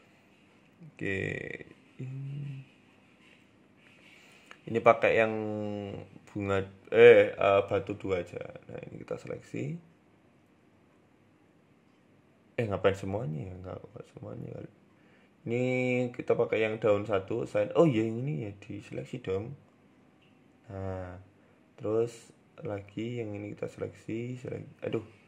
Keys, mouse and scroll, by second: 0.5 Tab, 1.2 shift+middle click, 1.2 scroll up 4, 1.5 shift+middle click, 3.2 click, 3.7 click, 5.3 middle click, 5.6-6.1 scroll up 8, 6.0 shift+middle click, 6.4 middle click, 6.8 KP_Decimal, 7.3 scroll up 1, 7.8 middle click, 7.9 shift+middle click, 8.2 scroll up 2, 8.5 a, 8.6 a, 9.3 alt+shift+right click, 10.9 alt+shift+middle click, 11.6 a, 12.2 ctrl+z, 12.3 ctrl+z, 12.6 ctrl+z, 12.9 shift+middle click, 13.7 alt+shift+right click, 15.1 click, 15.7 click, 16.8 click, 18.0 alt+shift+right click, 18.5 ctrl+z, 19.0 alt+shift+right click, 20.6 click, 21.1 shift+middle click, 22.4 a, 22.5 a, 22.9 alt+shift+right click, 25.1 ctrl+z.